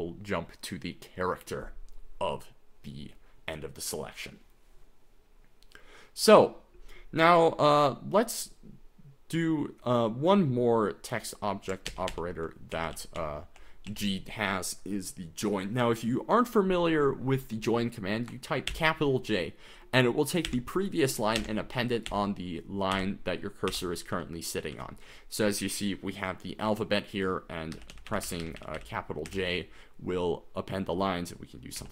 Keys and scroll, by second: 11.9 ctrl+d, 12.1 ctrl+d, 12.7-13.9 typing, 18.9 shift+j, 20.6 shift+j, 21.6 shift+j, 22.1 shift+j, 23.1-24.7 typing, 27.8-29.3 typing, 31.8 9.